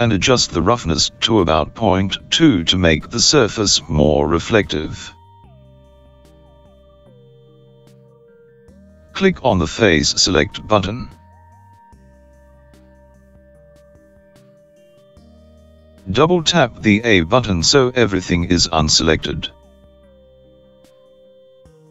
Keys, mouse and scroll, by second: 1.6 click, 14.0 click, 19.8 a, 20.0 a.